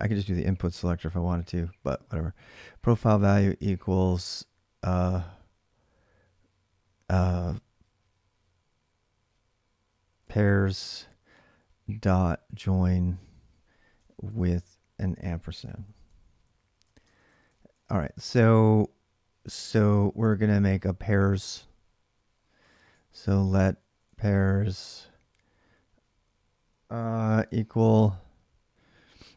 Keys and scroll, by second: 9.7-18.2 typing, 19.9 typing, 22.1-24.5 typing, 27.0 typing.